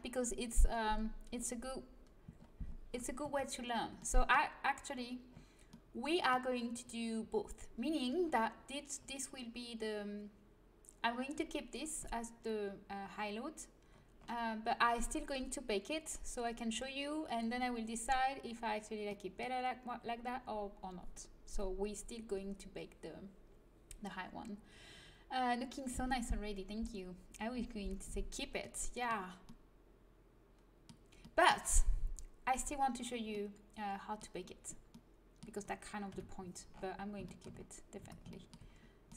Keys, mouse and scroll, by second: 2.3 middle click, 3.1 Tab, 3.4 middle click, 5.9-8.1 middle drag, 11.8-15.7 middle drag, 19.0-21.1 middle drag, 28.5-29.8 middle drag, 36.0 KP_3, 37.9 Tab.